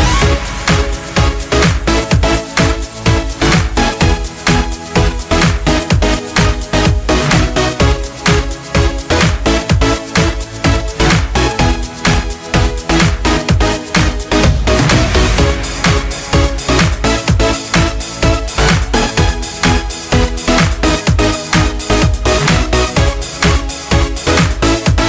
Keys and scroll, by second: 6.1 ctrl+space, 6.6 ctrl+space, 6.7 ctrl+space, 19.9-21.1 [, 21.3 [, 21.6 [, 21.8 [.